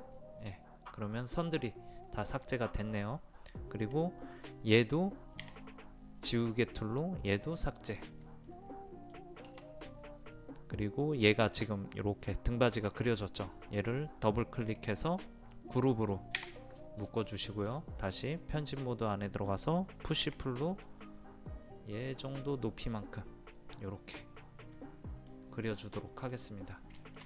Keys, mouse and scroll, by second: 1.6-2.6 middle drag, 2.9-5.4 scroll up 1, 5.4 e, 6.5-7.6 drag, 8.4-9.6 middle drag, 9.6 space, 13.7 click, 16.4 a, 18.0 click, 20.2 p, 20.6 click, 24.2-25.6 middle drag, 26.3-27.0 scroll down 1, 27.0 shift+middle click.